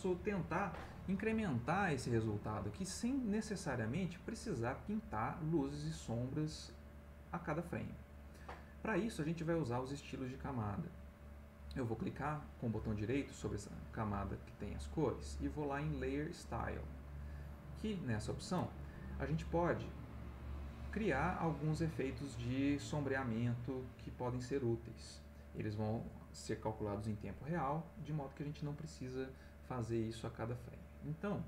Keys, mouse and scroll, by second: 13.2-16.2 right drag, 17.2-18.6 drag, 22.5-23.8 drag.